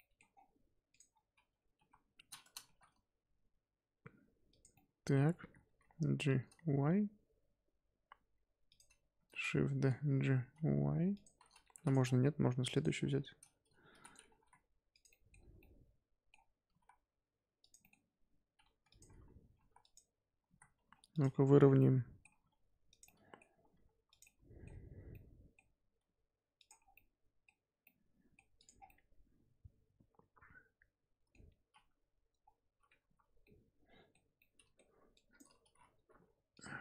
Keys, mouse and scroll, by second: 0.2 scroll up 1, 0.3-0.9 scroll down 5, 0.9 click, 1.0-1.6 scroll up 4, 1.7 KP_1, 2.6 shift+d, 4.7-5.3 middle drag, 5.3-5.7 scroll up 1, 5.7 g, 9.1 shift+d, 9.6 g, 11.7 x, 12.0-12.7 scroll down 2, 12.7 click, 12.9-13.6 scroll up 2, 13.6 scroll down 1, 13.9 shift+d, 14.3 g, 15.1 middle drag, 15.3 scroll up 1, 15.6-16.6 middle drag, 16.6 g, 17.7 scroll up 1, 17.8-18.6 middle drag, 18.6 g, 19.5 g, 20.3 g, 21.3-21.7 scroll up 1, 21.7-22.3 middle drag, 22.3 g, 23.0-23.6 middle drag, 23.6 g, 24.2-24.8 middle drag, 24.8-25.1 scroll down 1, 25.1-25.9 middle drag, 25.9 g, 26.8 scroll down 3, 26.9-28.5 middle drag, 28.5 click, 28.7 scroll down 1, 28.8-31.6 middle drag, 31.6-32.0 scroll up 3, 32.0 KP_5, 32.4-33.0 scroll down 1, 33.0 KP_1, 33.4-35.1 middle drag, 35.1 click, 36.0 g.